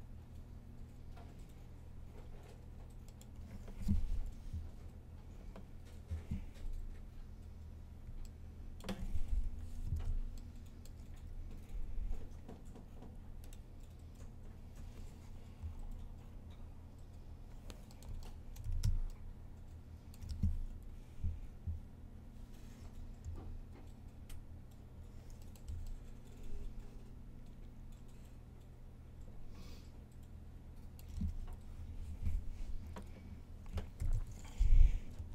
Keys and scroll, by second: 3.7-4.4 typing, 9.0-9.7 typing, 15.1-15.9 typing, 18.4 typing, 20.5 typing, 25.3 r, 31.2 1, 33.8 typing, 35.0 typing.